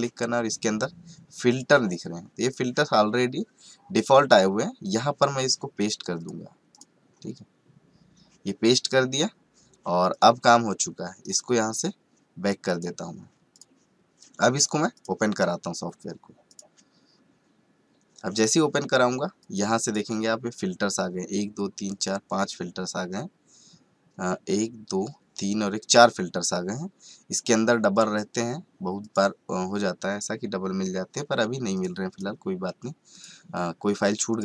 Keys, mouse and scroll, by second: 1.5 click, 3.9 right click, 4.8 click, 10.1 click, 11.2 right click, 12.7 click, 16.7 click, 19.4 click, 27.9 click, 31.7-34.4 drag.